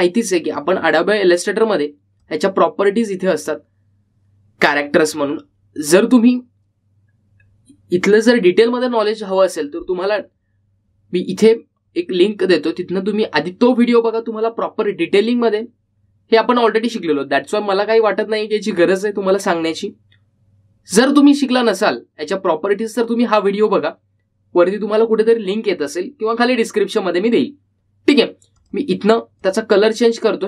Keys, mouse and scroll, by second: 3.3-6.5 drag, 5.8-6.6 typing, 29.4-30.2 typing, 29.7-30.4 drag.